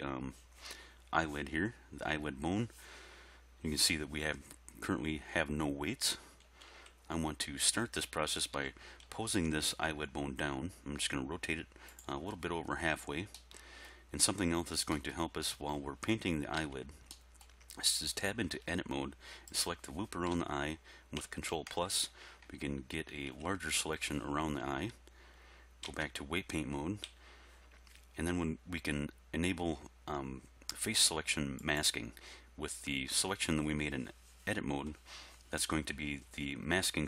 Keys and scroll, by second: 6.5 1, 6.8 3, 8.6 r, 9.1 x, 16.6 Tab, 25.9 Tab, 27.1 z.